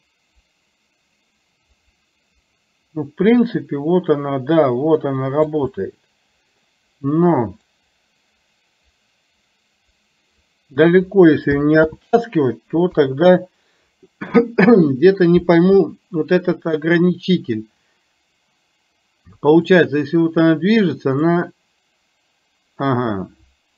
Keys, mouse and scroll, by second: 5.9 middle click, 7.8-11.0 drag, 12.9 KP_3, 19.9-21.4 drag.